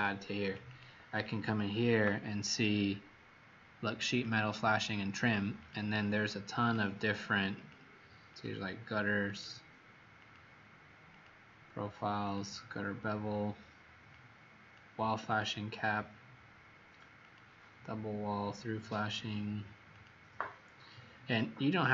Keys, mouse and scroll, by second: 0.3 click, 0.6 click, 4.0 click, 4.3 click, 5.5 click, 21.8 click.